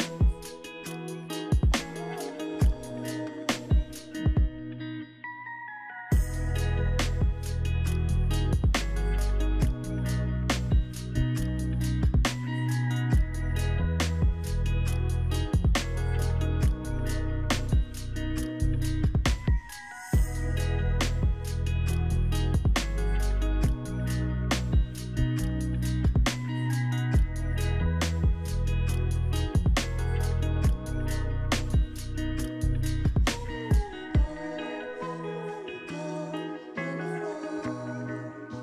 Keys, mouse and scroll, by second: 22.0-22.4 scroll up 3, 22.4-24.2 scroll down 5, 33.3-34.7 scroll up 3, 34.7-36.2 scroll down 3, 36.2 scroll up 1, 37.0-38.1 scroll down 4.